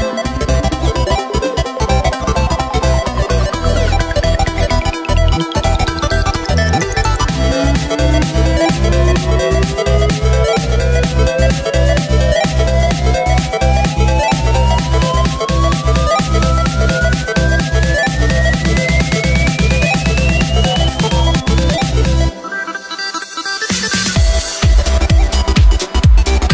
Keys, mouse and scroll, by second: 0.0-0.5 scroll down 2, 0.5-1.7 shift+middle drag, 1.7-2.8 shift+scroll down 2, 2.8 right click, 3.6 g, 5.5 click, 6.2-8.2 drag, 8.2 g, 9.7-10.7 scroll up 1, 10.7-11.4 scroll up 1, 11.4-13.8 middle drag, 13.8-14.9 scroll up 5, 14.9-15.7 middle drag, 15.7 scroll down 1, 15.8-17.2 scroll up 3, 17.2-18.1 middle drag, 18.1 right click, 18.7 shift+right click, 19.0 shift+right click, 19.7 shift+right click, 20.4 s, 21.4 shift+right click, 21.8 shift+right click, 23.0 ctrl+z, 24.2 ctrl+right click, 25.4-26.5 drag.